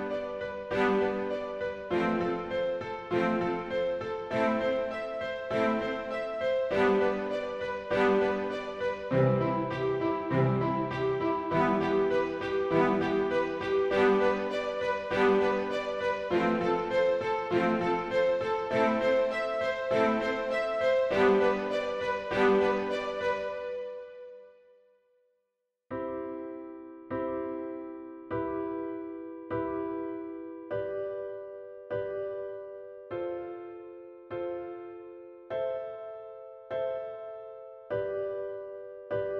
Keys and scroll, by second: 0.5 shift+g, 2.9 shift+g, 3.9 shift+Tab, 5.7 alt+shift+c, 6.3 alt+shift+Tab, 6.7 shift+a, 7.3 shift+Tab, 8.6 ctrl+shift+j, 8.8 ctrl+shift+Return, 8.8 shift+Tab, 9.0 shift+a, 9.7 ctrl+shift+a, 10.4 ctrl+shift+g, 11.1 shift+a, 12.0 ctrl+shift+g, 12.8 shift+a, 14.2 ctrl+shift+g, 15.1 shift+a, 16.4 shift+a, 17.2 ctrl+shift+a, 18.8 shift+a, 21.1 shift+a, 21.3 shift+w, 22.8 shift+a, 23.3 shift+f, 26.8 shift+f, 29.1 shift+f, 32.8 shift+f, 33.3 shift+a, 34.4 shift+a, 35.6 shift+Tab, 36.1 shift+space, 37.4 shift+Tab, 37.7 shift+s.